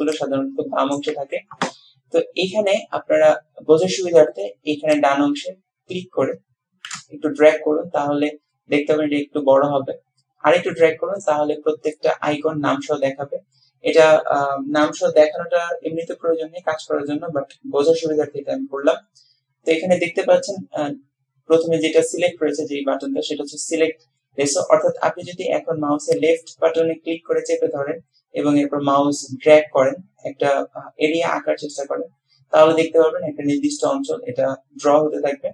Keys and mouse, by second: 5.0-11.4 drag, 26.3-35.5 drag.